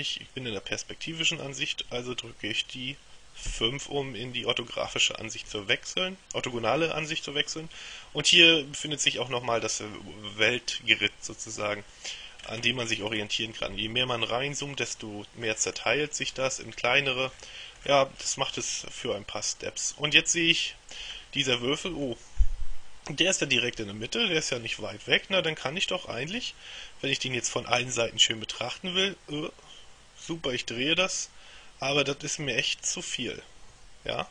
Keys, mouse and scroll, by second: 3.6 KP_5, 5.8-7.1 shift+middle drag, 12.6-13.8 scroll up 2, 15.6-16.9 scroll up 2, 17.4-19.6 scroll down 2, 20.3 shift+middle click, 21.2-21.9 shift+scroll up 1, 22.2 shift+middle click, 23.9-25.2 shift+middle drag, 28.4-34.3 middle drag.